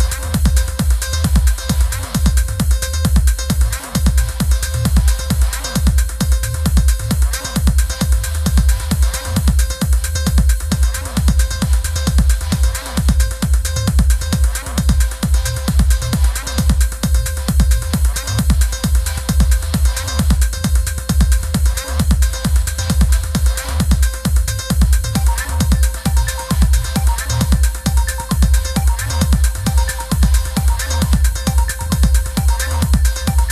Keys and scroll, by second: 4.5 v, 22.0 super+c, 22.3 super+v, 29.9 super+c, 30.4 super+v.